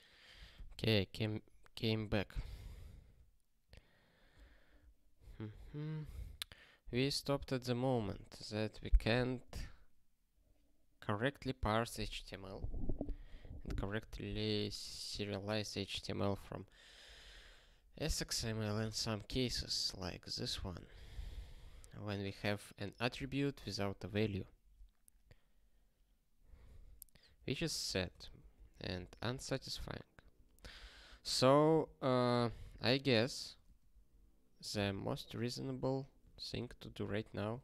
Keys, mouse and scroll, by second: 11.3 ctrl+s, 13.5 click, 19.6 click, 21.2 super+b, 23.7 click, 24.5 ctrl+b, 24.9 BackSpace, 25.0 BackSpace, 25.4 ctrl+s, 31.5 ctrl+p, 31.7 ctrl+p, 32.0 ctrl+a, 32.4 ctrl+alt+@, 32.7 alt+;, 33.1 ctrl+s, 33.5 ctrl+p, 34.6 ctrl+space, 34.7 ctrl+p, 34.9 ctrl+p, 35.8 alt+;, 36.6 ctrl+p, 36.8 ctrl+p.